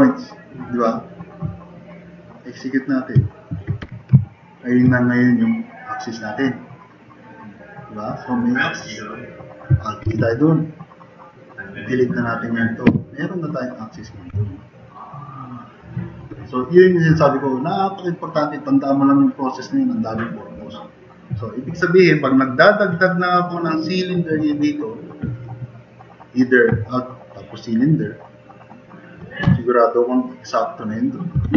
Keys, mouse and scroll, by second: 3.5 click, 3.9 4, 4.3-4.7 drag, 10.1 alt+g, 12.9 Delete, 22.4 middle drag, 22.4 scroll up 2, 29.5 t, 29.5 drag, 30.8 click, 31.4 r.